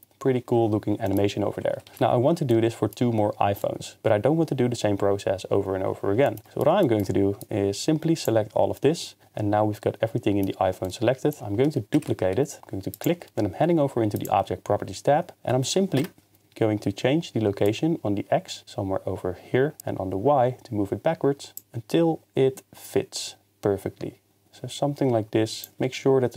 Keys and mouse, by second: 1.0-1.8 middle drag, 1.9 ctrl+s, 2.5-3.7 middle drag, 7.5 drag, 8.8-9.8 middle drag, 12.7 shift+d, 12.9-14.4 drag, 16.0 KP_0, 17.8-25.7 drag.